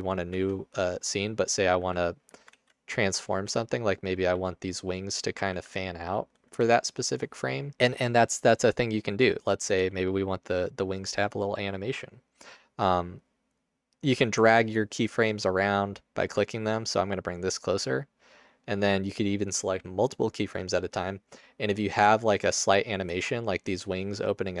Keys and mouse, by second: 0.4 Tab, 1.9 r, 2.7 ctrl+z, 3.5 r, 4.5 g, 5.5 r, 6.8 Tab, 9.8 g, 10.5 click, 13.7 click, 17.6 click, 22.8 click, 23.2 space, 23.7 space, 24.5 click.